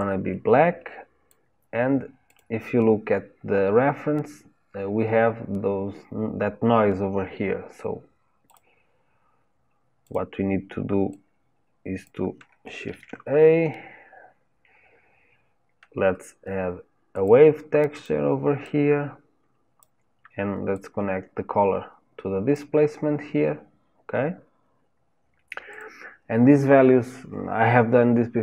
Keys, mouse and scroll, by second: 0.0 click, 2.3 click, 10.1 click, 18.7-20.9 drag, 22.6 click.